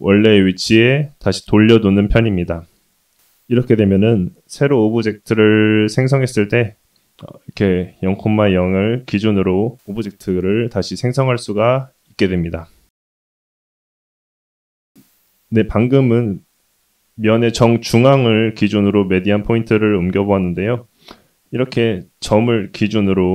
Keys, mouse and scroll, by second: 4.6 middle click, 5.7-6.3 scroll up 2, 6.3 middle click, 6.9-7.6 scroll down 2, 7.6-8.9 middle drag, 9.9-10.3 scroll down 1, 12.7 click, 13.3 Tab, 15.1 Tab, 15.1 middle click, 16.5 shift+middle click, 18.5 1, 18.8 click, 19.3 scroll up 1, 22.8 click.